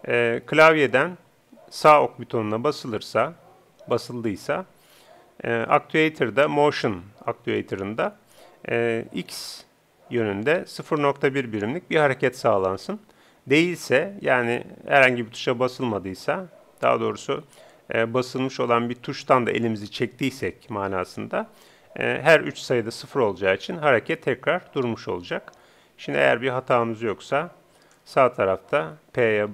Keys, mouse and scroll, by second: 26.3-29.5 drag.